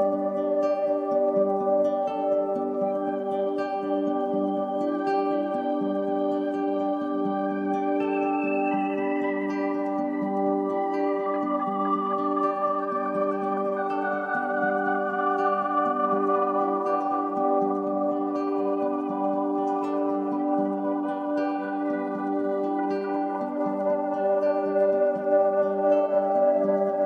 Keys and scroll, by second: 11.8 i, 14.1 v, 15.0 Down, 15.8 Up, 19.6 super+c, 23.8 super+c, 24.0 super+f, 24.4 shift+Down.